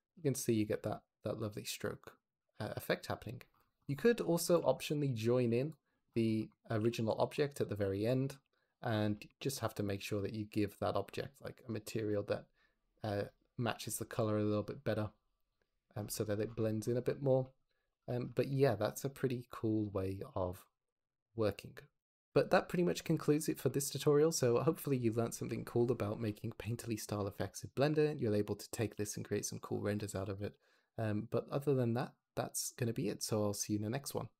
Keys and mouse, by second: 4.3 click, 4.5 shift+d, 5.2 g, 5.6 click, 6.7 g, 8.0 click, 8.2 g, 12.3-13.3 drag, 14.1 click, 17.8 click, 18.2 shift+middle drag, 18.5-19.1 drag, 22.0 shift+middle drag, 22.7 click, 26.1 click, 26.7 shift+click, 27.4 ctrl+click, 28.6 click, 28.8 g, 29.3 Escape, 29.7 click, 30.1 r, 30.3 r.